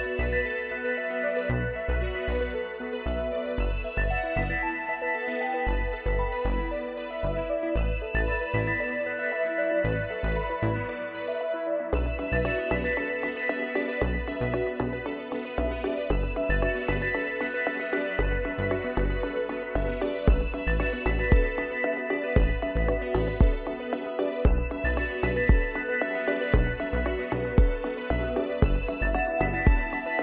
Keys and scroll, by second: 3.6 ctrl+z, 8.0 typing.